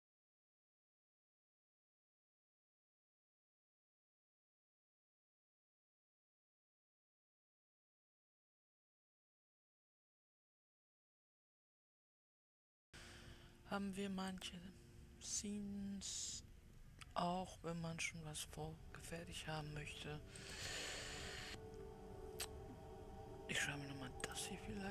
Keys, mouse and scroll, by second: 8.7 click, 11.3 click, 16.6 click, 22.5 click.